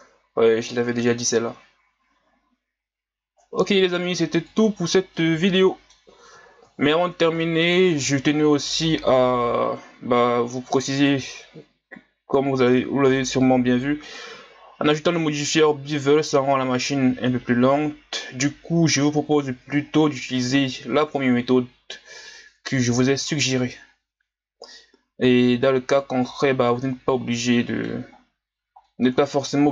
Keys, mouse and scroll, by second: 4.8 scroll down 2, 5.2-7.0 middle drag, 7.0 ctrl+scroll up 1, 7.4 middle click, 7.8-8.4 scroll up 6, 10.9 right click, 14.0-27.4 drag, 27.4-28.2 middle drag, 28.2-28.9 scroll up 2, 28.9-29.4 middle drag, 29.4 scroll up 5.